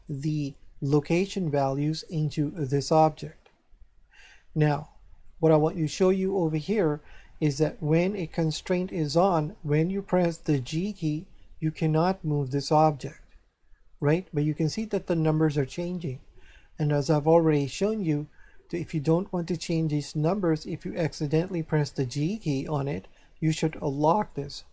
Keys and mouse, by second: 0.1 right click, 2.5 right click, 5.2 shift+middle click, 10.6 g, 13.9 right click, 21.7 g, 22.6 right click, 23.6 click.